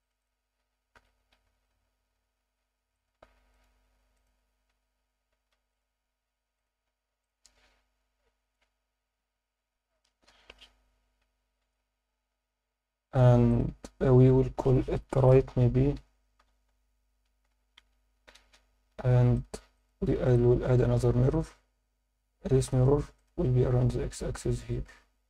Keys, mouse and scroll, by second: 0.0 click, 0.2 click, 0.9 g, 1.3 z, 2.9 click, 3.1 Tab, 3.5-4.7 right drag, 4.7 Tab, 5.5 ctrl+r, 6.6 click, 6.9 Tab, 6.9-7.2 scroll down 2, 7.2-8.5 middle drag, 8.7 Tab, 11.2 Tab, 11.2-11.7 scroll down 2, 11.8 Tab, 12.3 Tab, 13.5 click, 19.3 click, 19.7-21.4 drag, 22.6 click, 25.0 scroll down 2.